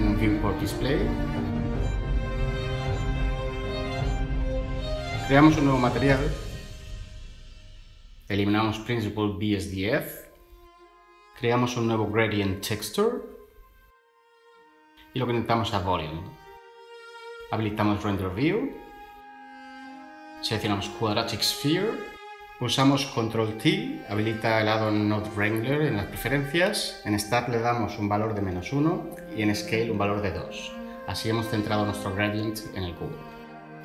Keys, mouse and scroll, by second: 2.0 /, 5.4 n, 8.7 Delete, 11.3 ctrl+shift+a, 11.6 typing, 13.3 a, 13.9 Return, 23.3 ctrl+t, 26.8-27.1 typing, 27.6 Return, 29.1 2, 29.2 Return, 33.2 ctrl+shift+a, 33.5-33.8 typing.